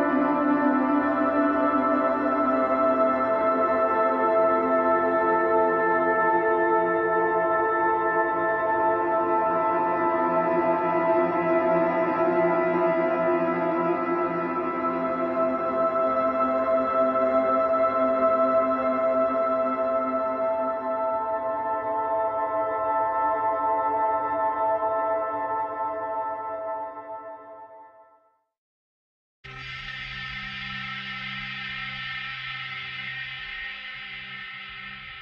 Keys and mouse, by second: 0.1 ctrl+z, 3.4 ctrl+z, 5.5 ctrl+z, 5.7 ctrl+z, 6.0 ctrl+z, 6.3 ctrl+z, 6.6 ctrl+z, 8.2 ctrl+z, 8.3 ctrl+z, 8.8 ctrl+z, 9.5 ctrl+z, 10.5 ctrl+z, 11.1 ctrl+z, 13.2 ctrl+z, 14.1 ctrl+z, 14.4 ctrl+z, 14.6 ctrl+z, 20.0 ctrl+z, 25.0 ctrl+z, 26.0 ctrl+z, 27.0 ctrl+z.